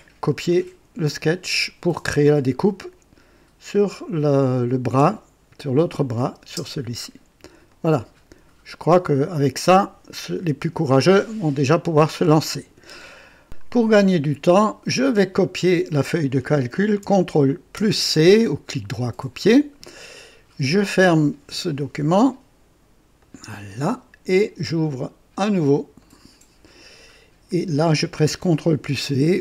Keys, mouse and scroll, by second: 4.9 click, 6.4 space, 7.7 click, 13.4 click, 15.4 click, 17.7 ctrl+c, 21.6 click, 23.2 click, 26.0 click, 28.9 v.